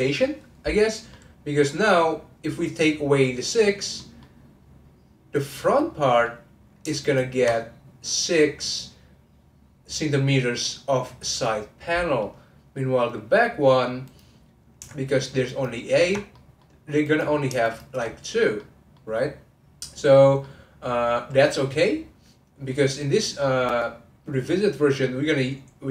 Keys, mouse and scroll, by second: 1.1-2.4 middle drag, 2.4-3.9 scroll up 1, 3.9-5.3 middle drag, 5.3 click, 5.7-7.0 middle drag, 7.0 ctrl+click, 12.2-14.0 middle drag, 14.0 click, 15.4 ctrl+click, 16.3 middle click, 17.0 click, 17.6 shift+click, 18.5 middle click, 19.2-19.6 scroll down 1, 19.6-20.1 scroll up 1, 20.1 scroll down 1, 20.4-23.5 middle drag.